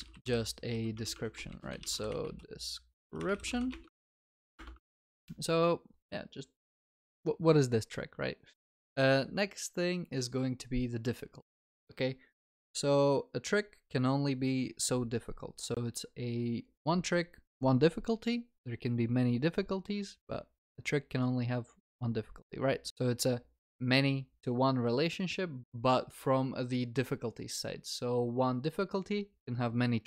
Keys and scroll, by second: 4.0 ctrl+s.